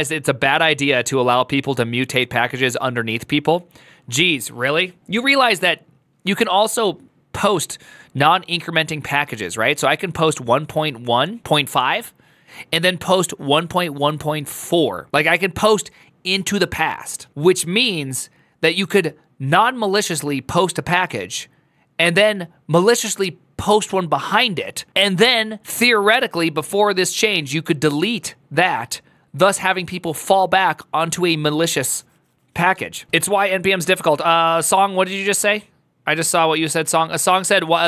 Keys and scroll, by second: 33.1 alt+f, 36.0 typing.